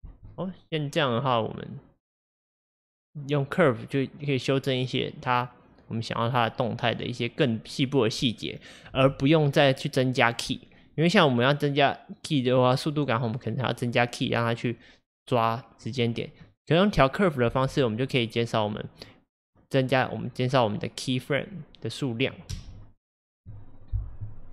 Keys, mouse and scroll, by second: 0.1 space, 9.0 space, 9.8-12.8 drag, 15.9-17.5 drag, 17.5 space, 22.6 space.